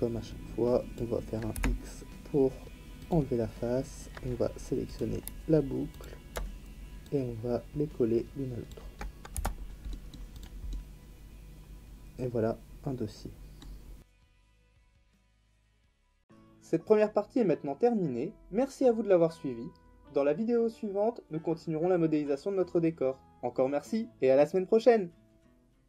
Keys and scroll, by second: 1.5 x, 9.3 Tab.